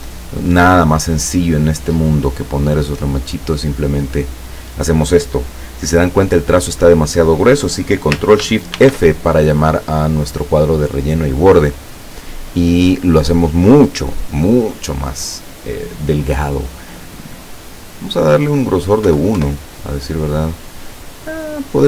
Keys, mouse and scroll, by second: 0.3 click, 3.2-4.7 drag, 8.8 ctrl+shift+f, 12.3 click, 19.2 KP_1, 19.4 KP_Enter.